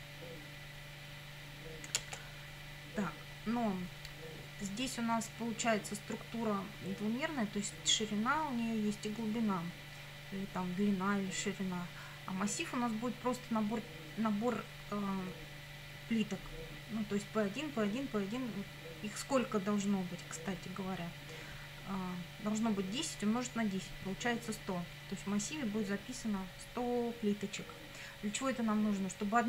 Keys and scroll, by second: 2.0 Return.